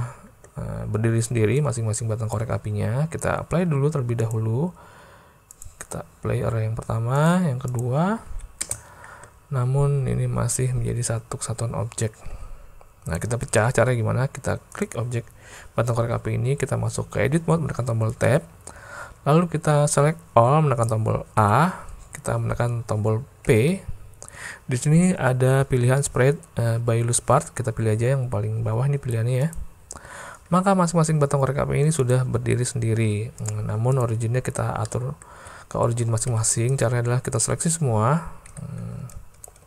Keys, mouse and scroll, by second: 1.7 click, 4.2-5.7 drag, 7.2-7.9 drag, 8.3 alt+a, 8.6 space, 12.3 space, 13.1 click, 14.8 click, 18.3 Tab, 21.4 a, 23.5 p, 30.5 Tab, 34.0 click, 34.9 middle click, 35.4 alt+a, 36.3 b.